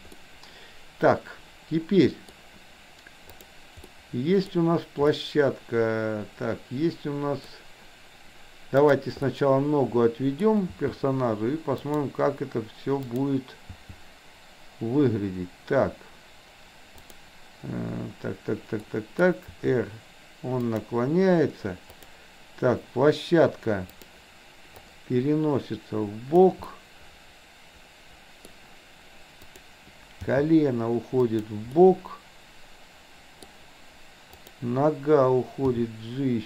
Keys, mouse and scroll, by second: 0.1-2.4 middle drag, 3.4 click, 3.8-4.5 middle drag, 5.1-7.5 middle drag, 8.8 click, 9.3-10.5 middle drag, 10.6 g, 13.0 click, 13.8 g, 18.9 middle click, 19.5 r, 23.9 click, 25.0-26.4 drag, 26.8-28.5 middle drag, 29.5 click, 30.3 g, 31.8-33.5 middle drag, 34.3-34.6 drag, 35.8 g.